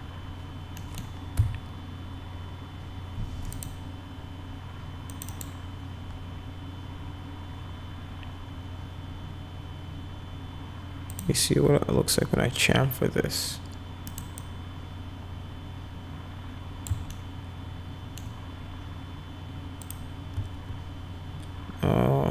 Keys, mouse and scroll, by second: 0.8 middle click, 1.3 F4, 3.5 click, 5.1 click, 5.3 click, 11.1 click, 14.1 right click, 14.4-16.9 drag, 17.1-18.2 alt+middle drag, 19.8 click.